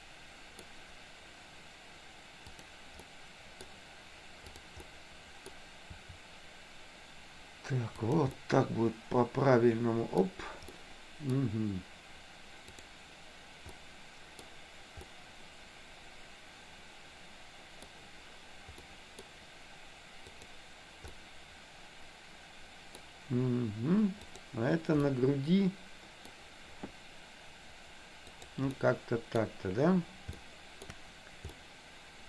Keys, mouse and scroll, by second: 2.6 click, 3.0 middle click, 4.7 click, 4.9 middle click, 6.0 r, 8.4-10.4 middle drag, 10.8 middle click, 12.8 click, 13.9 middle click, 15.1-17.9 middle drag, 18.9 middle click, 21.1-23.0 middle drag, 24.4 click, 25.2-26.4 middle drag, 26.9 r, 28.9 middle click, 30.4 shift+middle click, 31.6-32.2 middle drag.